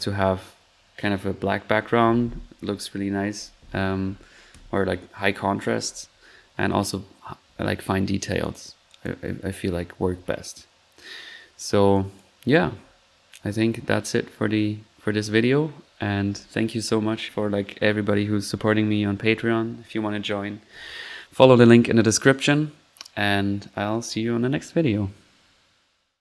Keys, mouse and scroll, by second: 8.4-9.5 drag, 9.5 middle click, 10.1 1, 11.3 middle click, 11.9 middle click, 11.9 click, 12.3 click, 25.7 typing.